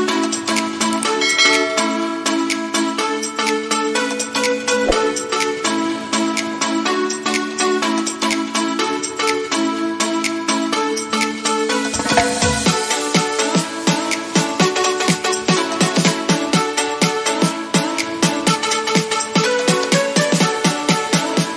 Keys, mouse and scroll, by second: 1.9-21.5 drag.